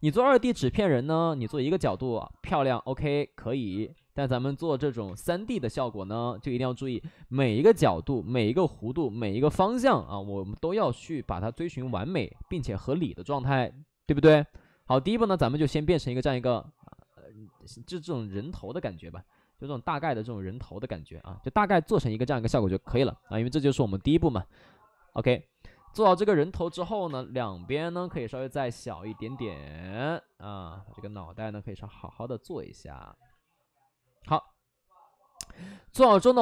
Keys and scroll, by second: 1.8 space, 3.0 ctrl+z, 3.8 ctrl+z, 5.0 space, 6.0 space, 6.7 space, 7.4 space, 9.9 space, 14.0 space, 14.8 space, 26.6 space, 26.9 3, 27.0 space, 27.6 space, 29.0 space, 30.5 ctrl+z, 31.3 space, 33.2 ctrl+z.